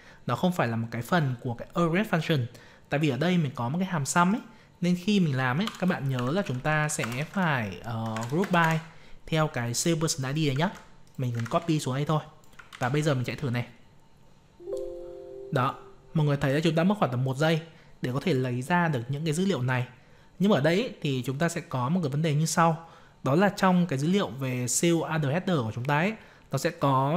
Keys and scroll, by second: 10.6 ctrl+c, 11.3 ctrl+v, 13.2 ctrl+c.